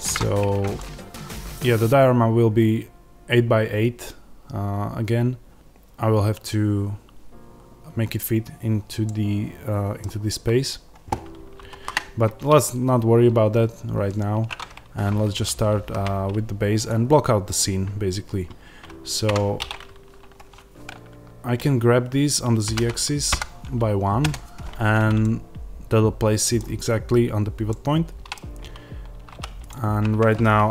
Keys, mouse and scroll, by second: 0.0 click, 0.7-30.7 middle drag, 9.9 scroll down 2, 10.1-12.6 scroll up 2, 12.6-16.8 scroll up 1, 16.8 shift+a, 19.2 Tab, 22.5 g, 24.2 KP_Enter, 29.6 click.